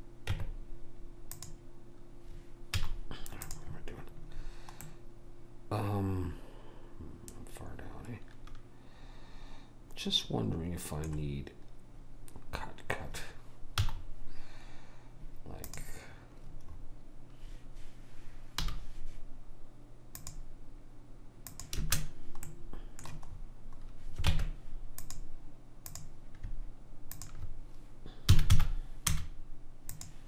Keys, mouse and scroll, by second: 0.4 Tab, 2.8 z, 4.9-6.1 middle drag, 13.8 z, 16.7-18.7 middle drag, 18.7 k, 22.5 middle click, 24.4 ctrl+Tab, 25.9-29.0 drag, 28.3 s.